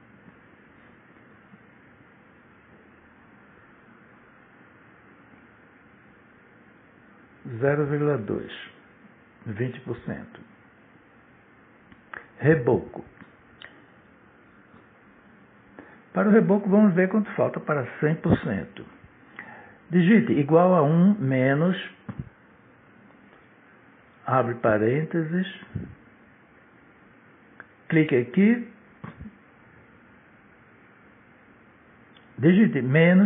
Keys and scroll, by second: 0.3-2.5 typing, 5.7 0, 6.5 ,, 7.2 2, 12.1 shift+r, 12.4 e, 14.0 c, 14.3 o, 15.5 Tab, 19.0 =, 23.8 1, 25.5 -, 26.0 shift+9, 30.2 shift+=.